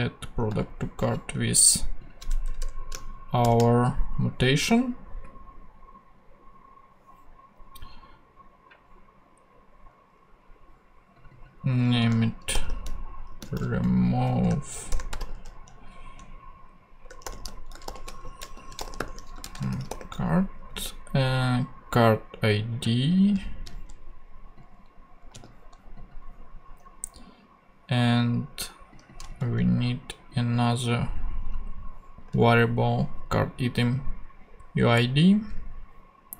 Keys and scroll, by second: 0.5 super+v, 2.4 BackSpace, 3.4 shift+super+p, 12.5-15.7 typing, 17.0-20.4 typing, 23.4 super+c, 29.3 super+c, 32.3 super+v.